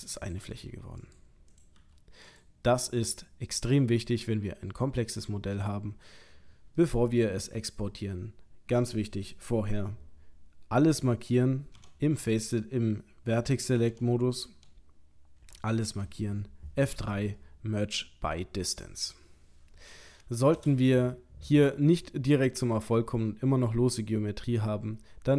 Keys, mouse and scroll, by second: 0.3 click, 0.5 g, 1.5 click, 1.8 g, 2.9 click, 3.5 middle click, 4.8 middle click, 5.6 middle click, 6.8 middle click, 11.8 Tab, 12.2 1, 13.9 Tab, 14.5 1, 15.4 a, 16.9 F3.